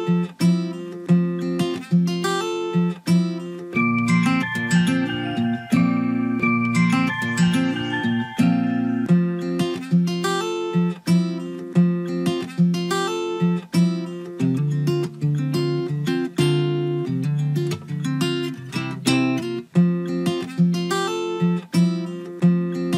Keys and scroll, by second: 11.7 ctrl+v.